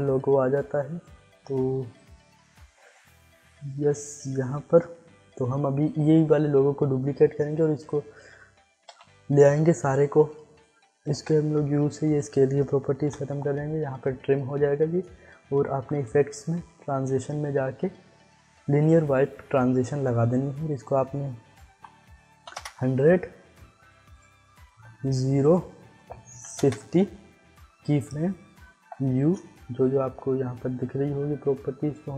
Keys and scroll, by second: 6.4 ctrl+d, 8.8 alt+[, 11.1 u, 13.0 u, 22.2 0, 22.5 Return, 24.7 0, 26.0 5, 26.3 0, 26.5 Return, 28.8 u.